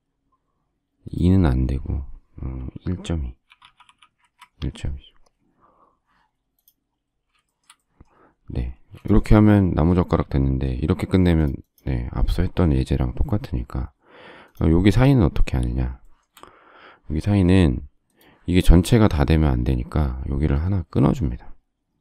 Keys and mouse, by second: 3.2-4.3 typing, 6.5 click, 8.7 space.